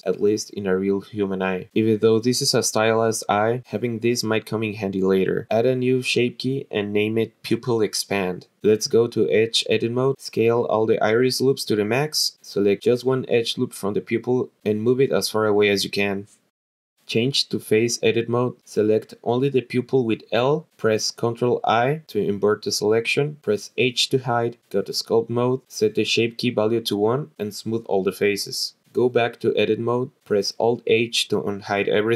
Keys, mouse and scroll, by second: 3.4 click, 6.5-8.8 drag, 9.1 click, 10.9 alt+shift+click, 11.5-14.3 typing, 11.7 click, 11.7 alt+shift+click, 12.0 click, 12.2 click, 12.3 alt+shift+click, 12.6 click, 12.6 alt+shift+click, 12.9 click, 13.0 alt+shift+click, 13.2 click, 13.3 click, 13.4 alt+shift+click, 13.6 click, 13.7 click, 13.8 alt+shift+click, 14.1 click, 14.2 alt+shift+click, 14.4 click, 14.7 click, 15.4 alt+shift+click, 15.5 g, 16.0 click, 17.9 click, 19.2 l, 21.4 ctrl+i, 22.4-23.3 scroll down 2, 23.3 h, 24.5 click, 26.7 click, 27.8 scroll up 2, 27.9 click, 30.6-31.2 drag, 31.3 alt+h.